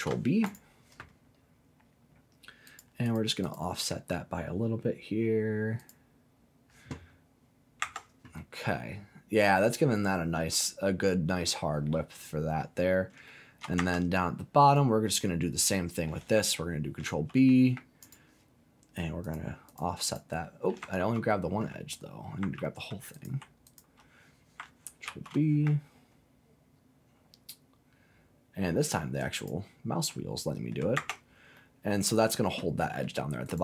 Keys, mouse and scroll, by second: 0.4 click, 2.6 click, 3.0 click, 3.4 click, 5.7 click, 7.0-7.8 scroll down 2, 7.8 Tab, 8.4-12.6 middle drag, 12.8 scroll up 2, 13.2 shift+middle click, 13.7 Tab, 14.2-14.6 scroll up 1, 14.6 click, 15.2 middle click, 17.0 ctrl+b, 18.0 click, 19.2 click, 19.6 click, 20.0 click, 20.9 ctrl+z, 22.5 ctrl+z, 23.1 click, 23.6 alt+click, 25.0 ctrl+b, 29.3 click, 30.1 scroll down 1, 30.3 middle click, 31.0 Tab, 31.5 middle click, 32.2-32.6 scroll down 2, 32.6 middle click, 33.0-33.4 scroll down 1, 33.4-33.6 right drag.